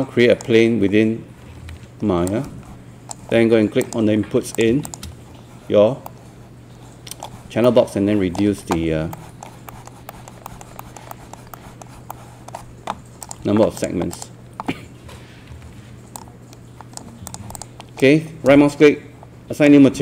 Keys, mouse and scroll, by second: 1.2-2.1 typing, 2.3 click, 4.9 shift+click, 6.1-13.2 middle drag, 13.2-17.2 drag, 15.1 e, 18.0-20.0 right drag.